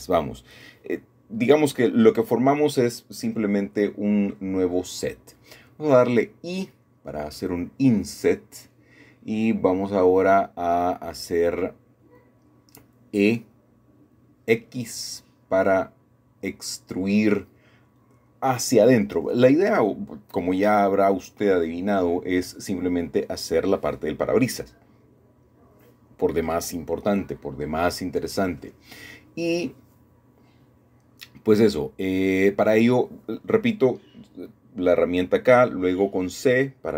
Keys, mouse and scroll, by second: 0.2-1.3 shift+middle drag, 6.4-7.8 drag, 8.1 e, 10.2 Escape, 10.7 ctrl+z, 12.0 e, 12.5 x, 16.4-17.5 drag, 17.5 middle click, 18.1-19.1 scroll down 2, 19.2-20.4 middle drag, 21.6 2, 22.1-23.2 scroll up 1, 24.0 a, 24.1 a, 25.0 alt+shift+click, 25.7-26.8 scroll down 2, 26.6 middle click, 27.1 middle click, 27.2-28.3 typing, 28.8 middle click, 28.8-29.6 scroll down 1, 29.6 scroll down 1, 30.2 middle click, 31.0-31.6 scroll up 1, 31.6-33.3 shift+middle drag, 34.1-35.8 middle drag, 34.1-35.1 scroll down 1, 36.1 shift+middle click, 36.1 typing.